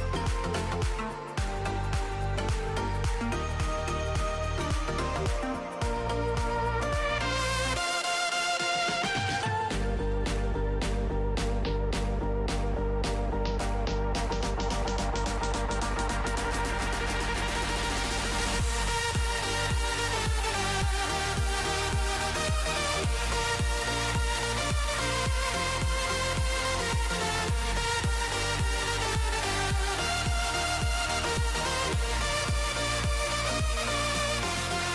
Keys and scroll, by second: 2.9-6.5 typing, 8.7-9.8 typing, 11.7-13.8 typing, 15.8 c, 16.7 h, 18.1-19.2 typing, 28.8-31.0 typing, 31.2 Tab, 32.6-33.6 typing.